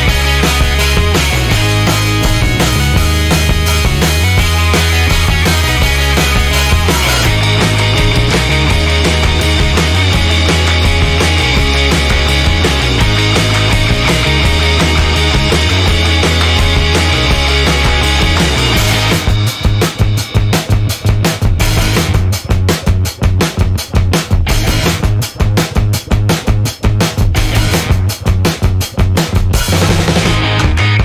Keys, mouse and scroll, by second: 0.2 1, 1.0 click, 6.1 click, 7.1 0, 7.7 click, 8.1 1, 8.8 click, 9.9 click, 10.9 click, 12.5 click, 13.3 click, 15.2 click, 18.0 click, 20.8 click, 21.6 click, 22.1 click, 22.4 space, 23.1 click, 23.4 space, 24.1 click, 24.3 space, 24.8 click, 26.1-27.3 drag, 28.4-30.0 drag, 30.6-31.0 drag.